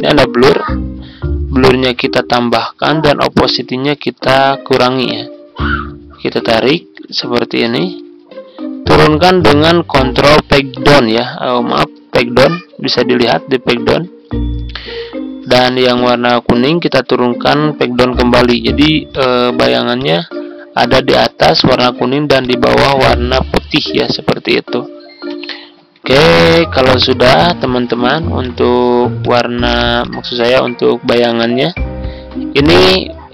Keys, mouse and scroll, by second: 7.6 Right, 7.7 Right, 7.9 Right, 8.1 Right, 10.3 ctrl+Page_Up, 10.8 ctrl+Page_Up, 11.9 ctrl+Page_Down, 12.1 ctrl+Page_Down, 13.2 Page_Up, 14.2 Page_Down, 15.8 click, 17.5 ctrl+Page_Down, 17.6 ctrl+Page_Down, 17.8 ctrl+Page_Down, 19.0 click, 25.3 Left, 25.6 Left, 25.9 Left, 26.6 ctrl+z, 26.8 ctrl+z, 28.4-31.0 drag.